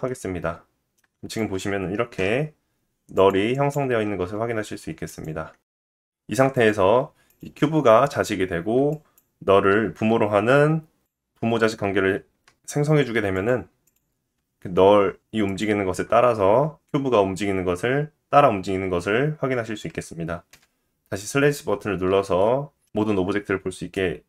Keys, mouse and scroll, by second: 1.3 shift+click, 1.4-3.1 shift+middle drag, 2.2 /, 3.2-5.8 drag, 4.2 g, 5.8 middle click, 6.6 click, 6.7 middle click, 7.3 click, 7.4-8.9 middle drag, 8.9-13.4 shift+drag, 13.8 ctrl+p, 14.7 click, 15.2 click, 15.7 g, 21.0 middle click, 21.0 /, 21.7-22.2 scroll down 1, 23.9 middle click.